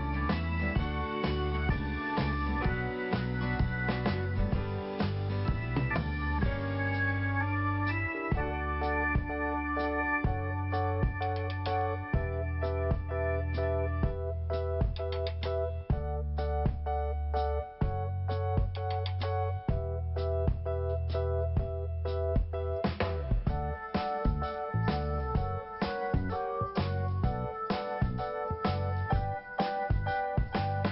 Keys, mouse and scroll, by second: 0.4 click, 2.0 click, 2.1 click, 2.3 click, 2.4 double click, 2.7 double click, 4.7 click, 5.1 click, 7.0 click, 7.5 click, 9.8 click, 10.2 click, 12.6 click, 13.1 click, 14.5 click, 14.8 click, 16.6 click, 17.0 click, 18.8 click, 20.4 click, 21.2 click, 23.0 click, 23.5 click, 25.4 click, 25.5 click, 25.9 click, 28.2 click, 28.6 click, 30.1 click, 30.6 click.